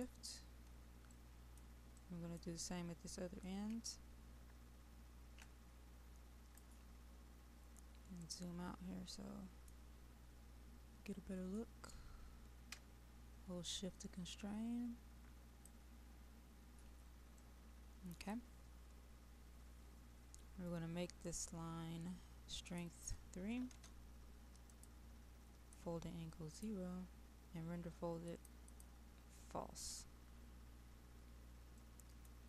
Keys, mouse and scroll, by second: 1.2 middle click, 3.5-6.6 drag, 7.6-8.3 scroll up 1, 8.3-10.4 middle drag, 11.6-15.6 drag, 17.4 middle click, 18.8-20.1 scroll down 1, 20.1-21.5 scroll up 1.